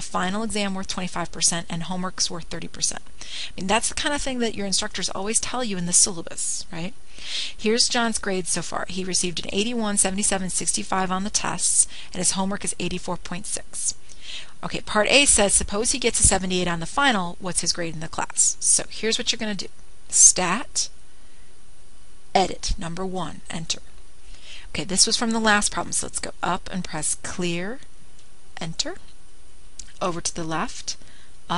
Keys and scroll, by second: 24.8 Return, 27.4 Up, 30.4 Return.